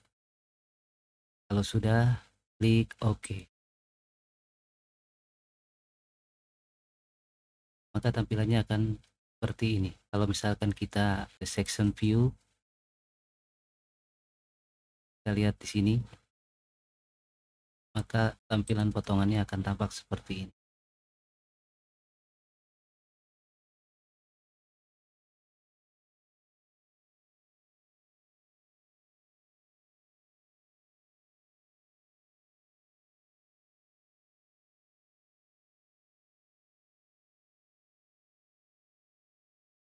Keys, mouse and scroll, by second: 3.1 click, 5.7-7.0 middle drag, 7.4 click, 7.9-10.0 middle drag, 14.9-17.6 drag, 18.6 click, 19.3-20.8 middle drag, 21.1-21.4 scroll down 2, 21.5-22.7 middle drag, 24.8 click, 26.0 middle click, 27.4 middle click, 30.4 click, 32.3 click, 33.1-34.1 middle drag, 35.1 click, 38.0 click, 39.8 click.